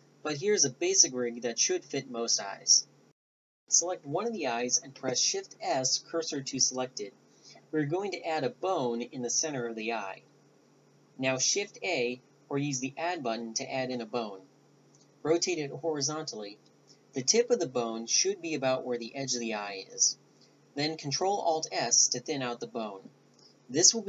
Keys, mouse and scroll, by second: 1.8 shift+s, 2.8 shift+s, 5.5 right click, 6.6 Tab, 11.8 click, 12.4 click, 13.6 click, 16.8 r.